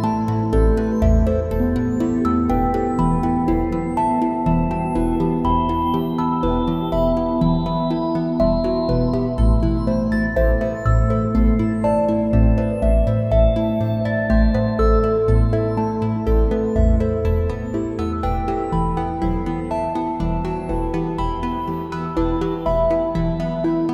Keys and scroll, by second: 2.0 space, 4.2 space, 6.5 space, 8.7 space, 11.0 space, 12.3 space, 20.1 space, 22.8 `, 23.0 space.